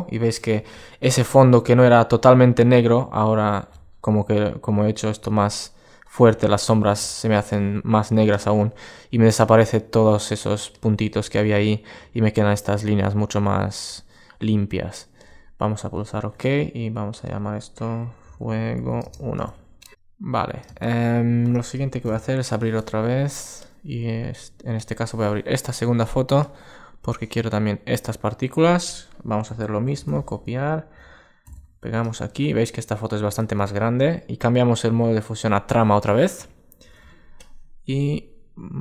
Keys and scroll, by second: 21.7 o, 29.2 super+c, 29.6 super+w, 31.3 super+v, 36.5 super+t.